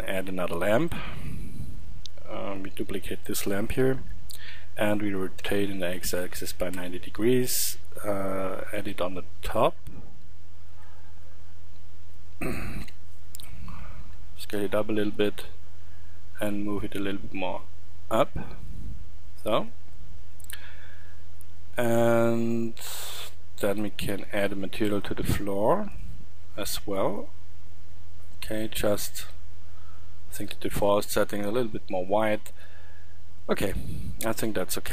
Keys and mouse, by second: 0.0 Escape, 3.5 shift+d, 5.2 r, 7.4-8.4 drag, 11.0-12.6 middle drag, 12.6 KP_7, 13.8 s, 20.0 middle click, 20.4-23.1 middle drag, 23.1-24.7 right drag.